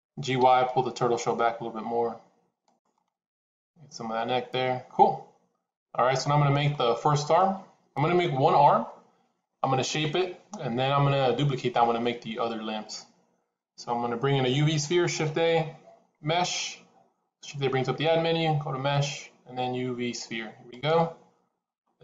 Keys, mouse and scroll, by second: 0.1 g, 2.8 middle click, 6.6 middle click, 8.0 KP_7, 15.2 shift+a.